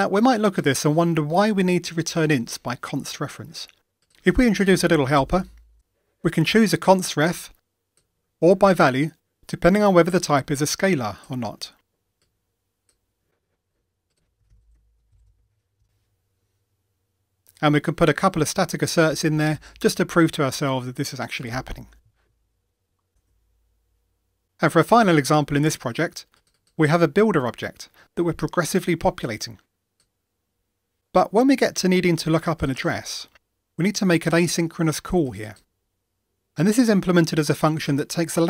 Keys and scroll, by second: 5.7 Return, 14.7 Tab, 18.6 Tab, 19.9 Return, 22.1 super+F9, 23.1 ctrl+r.